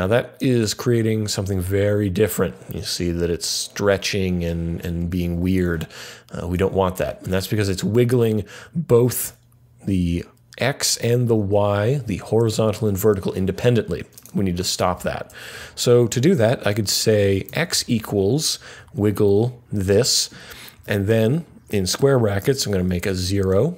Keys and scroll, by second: 15.5 Up, 17.4 x, 17.7 =, 18.7 Right, 19.0 Down, 20.7 [, 20.8 ], 21.2 Left, 22.3-22.8 typing.